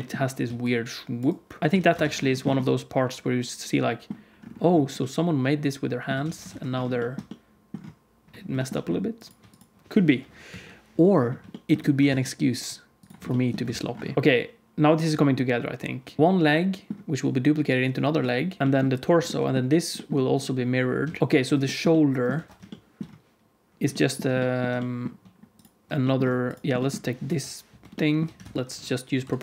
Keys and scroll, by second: 0.4 d, 1.6 d, 1.7 alt+a, 2.0 ctrl+s, 6.2 alt+a, 6.5 ctrl+s, 10.1 KP_1, 10.4 KP_3, 12.0 shift+d, 13.7 ctrl+s, 14.1 z, 14.1 alt+h, 14.1 alt+a, 16.2 alt+shift+z, 16.2 h, 21.0 alt+shift+z, 21.2 alt+a, 21.2 ctrl+s, 22.3 ctrl+s, 27.2 KP_1, 28.3 shift+d, 29.1 Tab, 29.1 alt+z, 29.1 o.